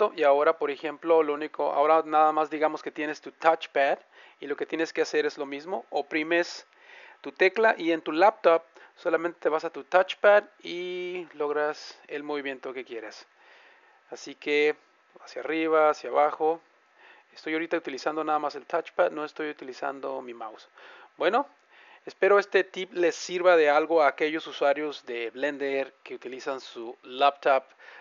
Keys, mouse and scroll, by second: 7.3 `, 14.2 `.